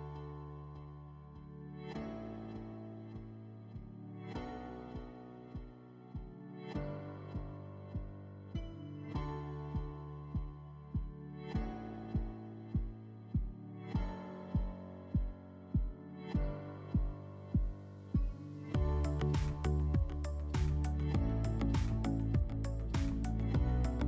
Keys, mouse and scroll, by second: 0.5-2.1 drag, 7.6 click, 8.1 click, 9.5 click, 9.7 click, 12.0 /, 13.6 /, 14.9-17.8 drag, 18.0 click, 20.4 click, 22.0 click, 22.8 /, 22.9 click.